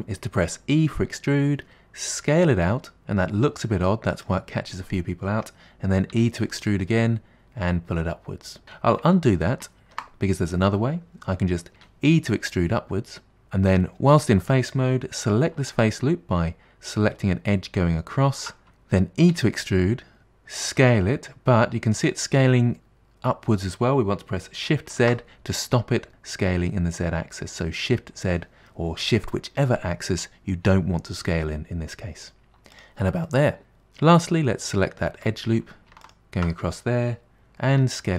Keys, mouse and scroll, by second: 0.0 e, 6.2 e, 9.4 ctrl+z, 9.9 ctrl+z, 11.8 e, 18.7 g, 19.4 e, 33.4-35.2 middle drag, 35.3 2, 36.1 alt+click, 37.8 s.